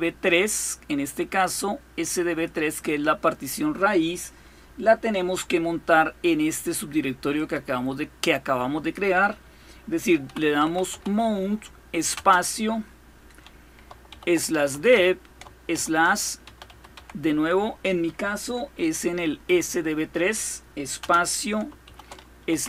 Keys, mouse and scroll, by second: 0.0-2.3 drag, 7.1 click, 9.7-11.9 typing, 13.7-17.2 typing, 19.2 typing, 20.8-22.6 typing.